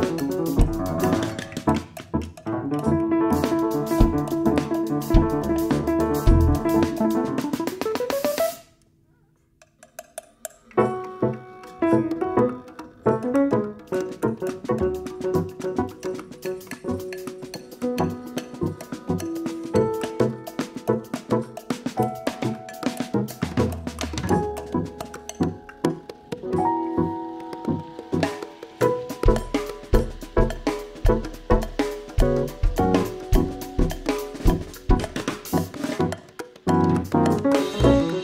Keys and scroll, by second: 0.0-0.2 typing, 1.7 x, 4.9-5.7 typing, 7.2-9.4 typing, 10.5-11.4 typing, 17.1 ctrl+r, 18.9-19.5 typing, 19.6 Return, 26.2 ctrl+r, 35.7 ctrl+z, 36.0 x, 36.4 ctrl+c, 36.8 ctrl+v, 37.6 ctrl+v.